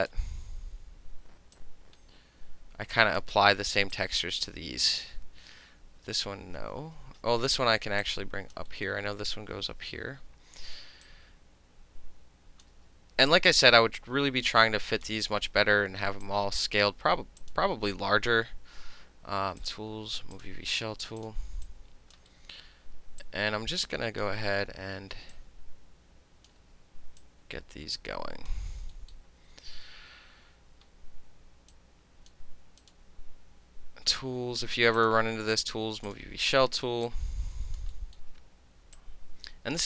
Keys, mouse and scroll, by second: 0.1-1.6 alt+middle drag, 1.6-3.2 alt+drag, 3.2-3.9 alt+middle drag, 3.9-4.9 alt+drag, 6.4 ctrl+z, 8.0-8.5 drag, 8.7 alt+middle click, 10.0 w, 11.1-12.6 drag, 12.6 middle click, 12.7 w, 13.3-15.1 drag, 15.1 middle click, 16.3-16.8 drag, 17.4 click, 19.6 click, 20.4 click, 21.2 click, 21.7-22.1 drag, 22.2 alt+middle click, 22.5 alt+middle click, 23.2-24.2 drag, 24.2-25.3 middle drag, 24.3 e, 25.3-26.5 drag, 26.5-27.2 middle drag, 26.6 w, 27.2-28.5 drag, 28.5-28.9 middle drag, 29.1-31.7 alt+middle drag, 31.7-32.3 drag, 32.8 click, 35.0 click, 36.1 click, 37.1-37.8 drag, 37.9 alt+middle click, 39.0-39.8 drag.